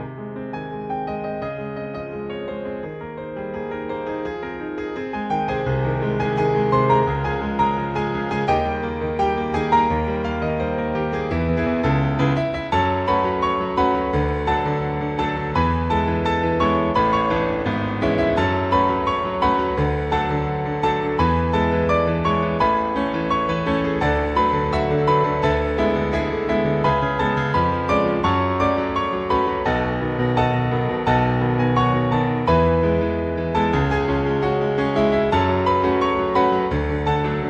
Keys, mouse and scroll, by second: 0.2 click, 1.0-1.5 scroll down 1, 2.0 scroll up 3, 8.8 click, 10.1-11.5 scroll up 2, 15.9 click, 20.7 click, 26.9 click, 32.6 click, 35.7 click.